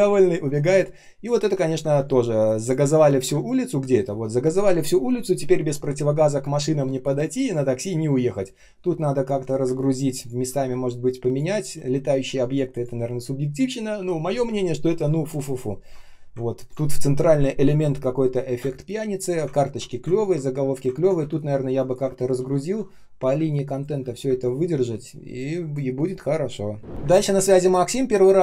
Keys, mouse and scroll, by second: 0.1-0.5 ctrl+scroll down 1, 0.5-3.7 typing, 1.6 ctrl+scroll up 1, 3.0 ctrl+scroll up 1, 6.3 space, 6.8 space, 9.5 space, 10.1 space, 10.1 space, 12.7 space, 12.8 space, 16.5 ctrl+click, 18.5 space, 19.0 space, 19.1 space, 19.4 ctrl+scroll up 1, 20.1 ctrl+scroll down 1, 20.9 ctrl+scroll up 1, 22.5 ctrl+scroll down 1, 23.3 space, 23.8 space, 23.8 space, 27.1 space, 27.4 space, 27.5 space.